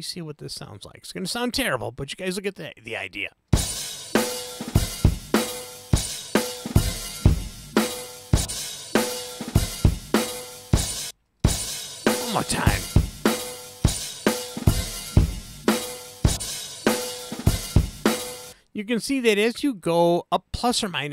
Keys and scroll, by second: 3.5 space, 11.0 space, 18.4 space.